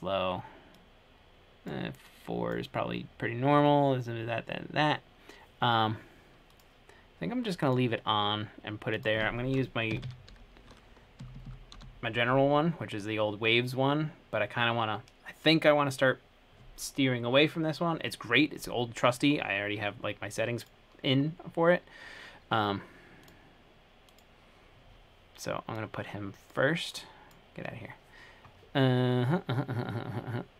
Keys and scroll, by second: 10.2-12.5 typing, 11.4 Down, 11.6 Down.